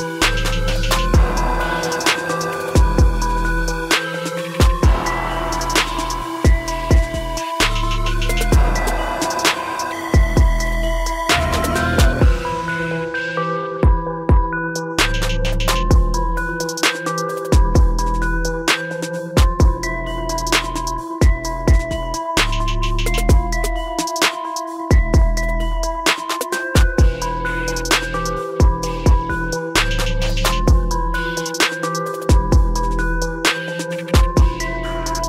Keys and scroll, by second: 4.3 ctrl++.